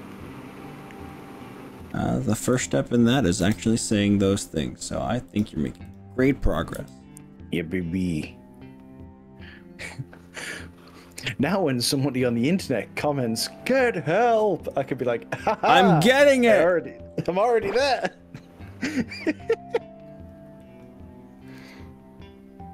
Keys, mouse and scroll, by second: 1.2 click, 2.0 click, 2.5 click, 3.5 g, 5.4 click, 6.8 g, 10.0-10.6 scroll up 3, 10.8-11.4 scroll down 4, 13.0 drag, 13.7 click, 14.9 click, 15.4 click, 16.3 g, 16.7 scroll up 2, 17.2-17.8 scroll down 4, 20.6 click, 21.5 click.